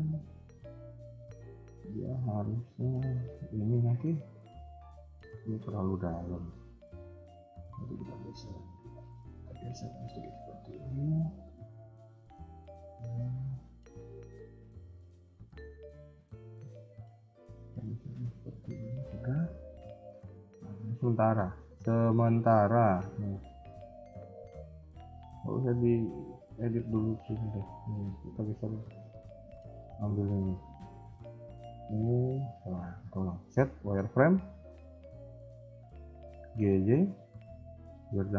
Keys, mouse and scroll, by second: 0.2 shift+middle click, 7.3 alt+click, 8.0 g, 9.1 s, 13.6 a, 13.8 a, 15.5 ctrl+z, 15.9 ctrl+z, 16.9 ctrl+z, 17.2 g, 18.9 KP_1, 19.4 scroll down 1, 19.6 middle click, 20.2 KP_3, 20.4-20.9 scroll down 2, 20.9 scroll up 1, 21.3 shift+middle click, 21.6 scroll up 1, 22.1 z, 22.9 a, 23.0 a, 23.2 b, 25.8 g, 30.6 a, 30.8 a, 31.8 z, 33.0 scroll up 2, 33.3 z, 34.5 b, 36.3 g.